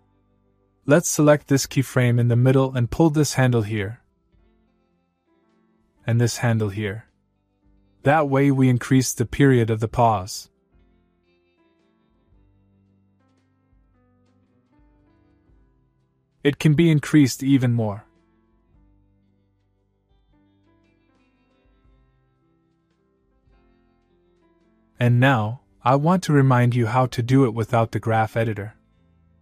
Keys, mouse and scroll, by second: 3.5-5.4 click, 6.1 click, 12.2-13.1 click, 12.9 space, 15.3 space, 15.6-16.6 click, 20.1-20.7 click, 20.6 space, 22.7 space, 23.1-24.1 click, 28.3 click.